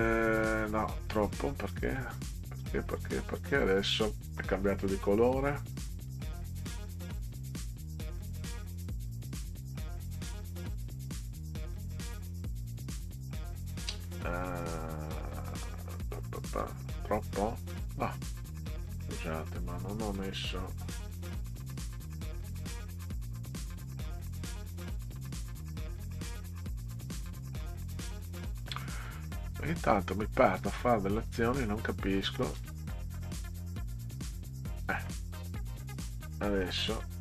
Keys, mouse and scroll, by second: 1.6 click, 3.0 click, 7.0 click, 7.8-8.2 scroll down 6, 11.1 click, 11.7 click, 12.1 click, 21.5 click, 22.6 click, 30.4 click, 31.1 click, 32.6 f, 33.2 click.